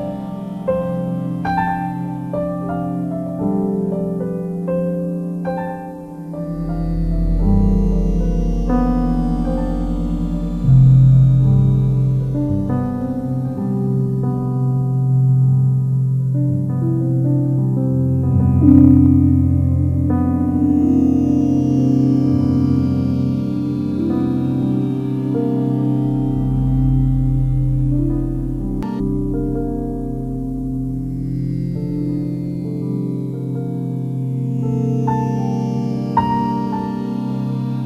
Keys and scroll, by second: 8.8 ctrl+d.